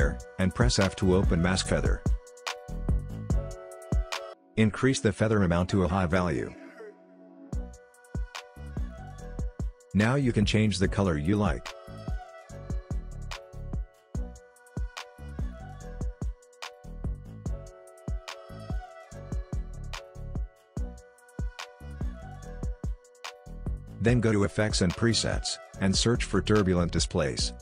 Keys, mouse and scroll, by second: 2.1 f, 4.6-18.9 drag, 25.2 click, 25.8-27.2 typing.